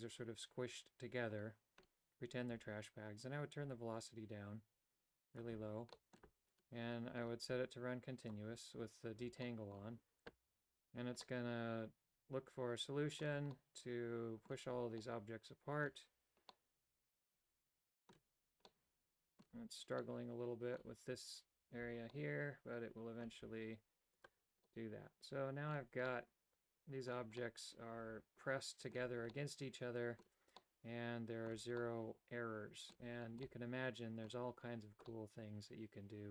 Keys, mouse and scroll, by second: 3.2-5.4 drag, 5.9 middle click, 8.4 click, 9.7 middle click, 11.4-13.4 middle drag, 13.7-14.7 middle drag, 15.1-16.2 middle drag, 16.7-18.3 middle drag, 18.8 middle click, 20.2 middle click, 22.3-23.5 middle drag, 24.3 click, 24.7-25.7 middle drag, 26.1-27.1 middle drag, 27.4-28.9 middle drag, 29.3 middle click, 30.6 middle click, 31.8-33.0 middle drag, 33.4 middle click, 35.1-36.3 middle drag.